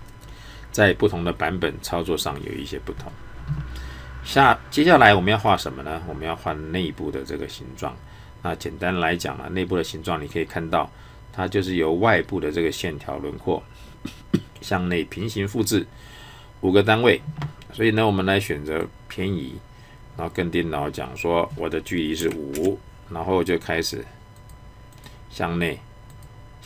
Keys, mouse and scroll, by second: 18.7 click, 24.4 click.